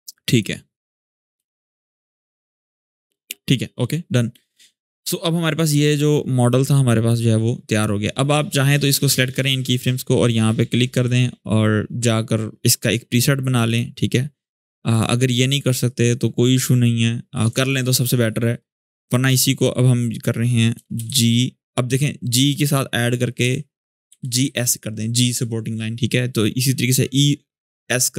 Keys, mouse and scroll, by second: 0.1 click, 1.1 space, 3.2-4.2 drag, 5.3-8.6 drag, 8.6-9.2 drag, 10.5 click, 13.4 click, 13.4 click, 14.7 click, 17.3 alt+scroll up 1, 17.8 shift+scroll down 1, 19.3 click, 20.5 Return, 20.8 shift+g, 23.2 -, 24.2 shift+s.